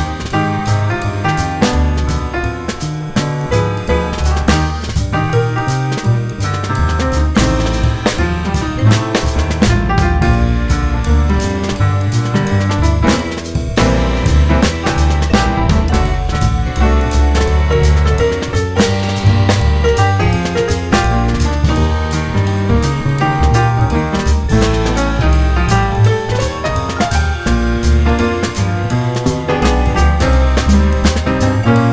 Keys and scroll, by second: 1.4 ctrl+z, 4.5 F4, 5.1 F4, 6.6 F4, 7.9 F4, 8.7 F4, 9.8 4, 10.0 F4, 13.2 F4, 18.0 F4, 20.1 F4, 23.4 ctrl+z, 24.7 F4, 25.9 F4, 26.9 F4.